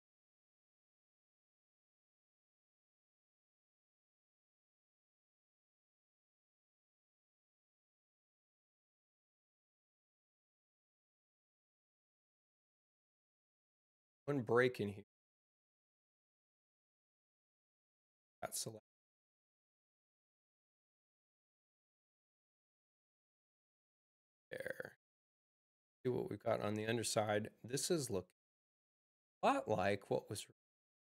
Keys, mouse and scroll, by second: 1.2 click, 4.5 click, 5.7 click, 6.8 c, 10.9 right click, 14.2 u, 15.0 click, 18.3 click, 19.2 click, 21.7 space.